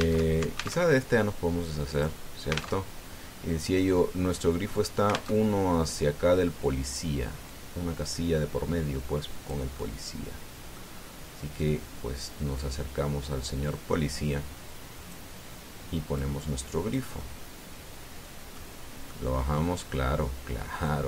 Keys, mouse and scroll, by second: 1.1 alt+Tab, 2.7 click, 3.6 alt+Tab, 6.1 alt+Tab, 8.2-10.4 drag, 10.6-11.7 drag, 12.4-16.1 drag, 16.9 click, 18.0-19.5 drag, 19.9 click.